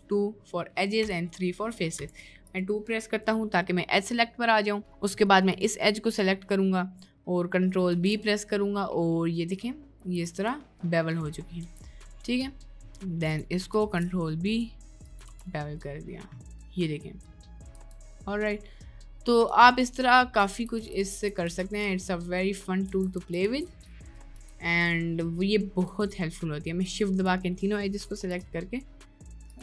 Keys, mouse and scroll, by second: 0.9 3, 2.0 2, 4.9 middle click, 5.5 click, 6.0 middle click, 7.6 middle click, 8.0 ctrl+b, 10.3 Tab, 10.7 middle click, 11.6 Tab, 12.1 middle click, 13.9 ctrl+b, 15.3 Tab, 15.6-16.1 middle drag, 16.5-17.3 middle drag, 17.5 middle click, 17.8 Tab, 18.5 middle click, 19.5 Tab, 20.0 middle click, 20.5 ctrl+z, 20.8 ctrl+z, 21.1 ctrl+z, 21.4 ctrl+z, 21.9 Tab, 22.9 ctrl+shift+z, 23.3 ctrl+shift+z, 23.4 ctrl+shift+z, 24.3 middle click, 24.4 Tab, 25.2 middle click, 26.0 shift+click, 26.8 shift+click, 27.8 middle click, 28.2 ctrl+b.